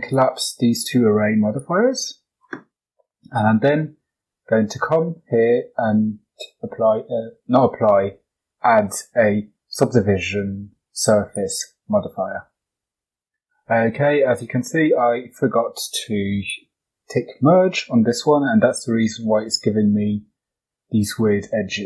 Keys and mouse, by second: 0.0 click, 1.5-11.3 drag, 14.0 shift+middle click, 14.6 middle click, 16.4 click.